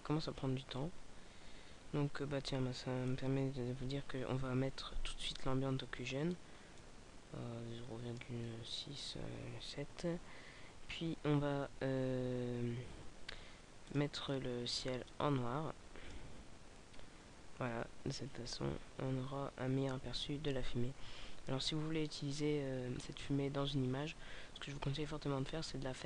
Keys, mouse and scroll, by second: 1.5 Escape, 3.0 click, 18.7-20.2 scroll down 2.